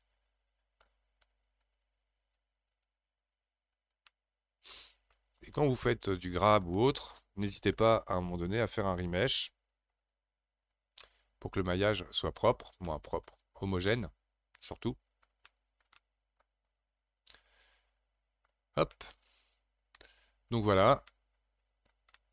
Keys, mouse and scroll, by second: 1.6-4.1 drag, 4.1-5.4 middle drag, 5.4-5.9 scroll down 2, 5.9 shift+middle click, 6.7-7.0 scroll down 1, 7.0-8.9 middle drag, 8.9-11.0 drag, 11.0-13.5 middle drag, 13.5-13.9 scroll down 3, 13.9-22.3 middle drag.